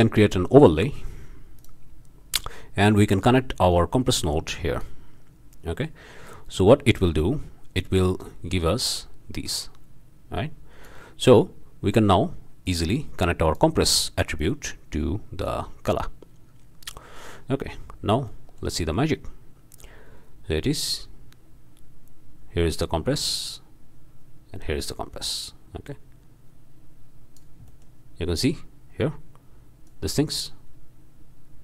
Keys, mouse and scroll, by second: 1.6-2.1 drag, 3.2-5.0 drag, 7.9-11.0 drag, 11.6 middle click, 11.9 click, 12.3 middle click, 12.6-13.7 drag, 13.7-14.4 middle drag, 14.4-16.2 drag, 18.3-18.8 drag, 18.9 shift+click, 19.8-27.6 drag, 29.8-31.6 drag.